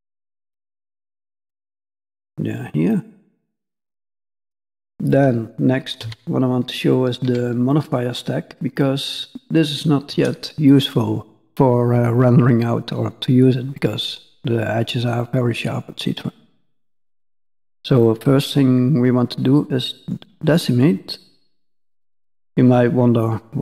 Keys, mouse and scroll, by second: 0.1 click, 0.9-1.9 scroll down 4, 1.9 click, 1.9 scroll down 2, 2.9 click, 3.8 click, 4.1 shift+scroll down 1, 4.2 shift+middle click, 5.1 middle click, 6.0 n, 6.7-7.2 scroll down 2, 6.9 middle click, 7.2 b, 8.5-9.6 scroll up 3, 8.8 middle click, 9.6 scroll up 1, 13.7 middle click, 15.0-15.5 scroll down 2, 15.1 middle click, 16.9 click, 18.0 click, 21.5 click.